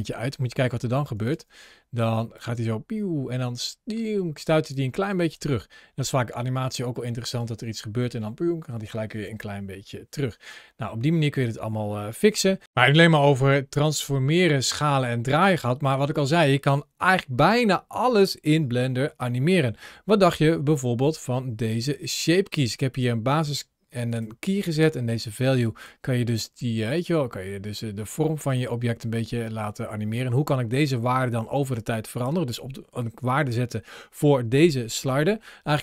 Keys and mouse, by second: 2.0 drag, 2.4 space, 4.5 space, 4.8 drag, 27.6-31.7 drag.